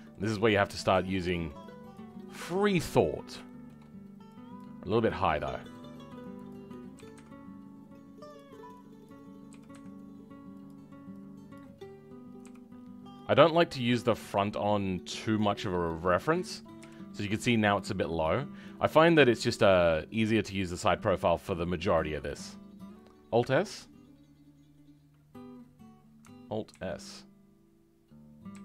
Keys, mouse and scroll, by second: 0.5-1.9 scroll up 2, 1.9 click, 2.4 shift+middle click, 3.1-3.4 scroll up 1, 3.4 shift+middle click, 4.5 click, 9.5 g, 11.5 click, 12.3 g, 15.5-15.8 scroll down 3, 15.8 middle click, 16.3 middle click, 16.7 KP_1, 17.2 scroll up 2, 18.5-18.9 scroll down 2, 18.9 middle click, 19.7-21.2 middle drag, 21.2 scroll down 1, 21.3-26.7 middle drag, 26.7 alt+s.